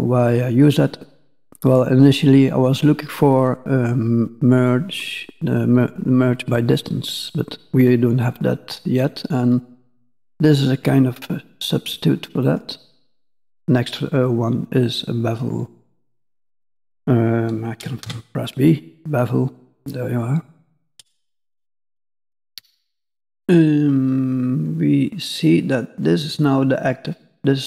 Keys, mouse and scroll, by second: 12.4 click, 19.0-19.7 scroll down 3, 19.7-20.8 scroll down 1, 20.8-22.7 scroll up 2, 23.2 middle click, 26.1-26.5 scroll up 2.